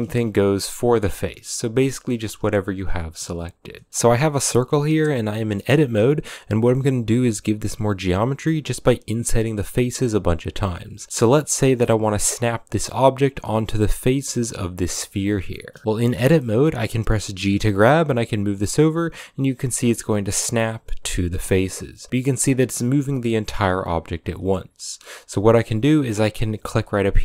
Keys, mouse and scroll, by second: 1.9 g, 3.8-6.9 shift+middle drag, 6.9 i, 8.2-11.4 typing, 11.0 shift+middle click, 15.3-17.3 middle drag, 17.3 g, 20.4 middle click, 20.8 g, 24.1 g.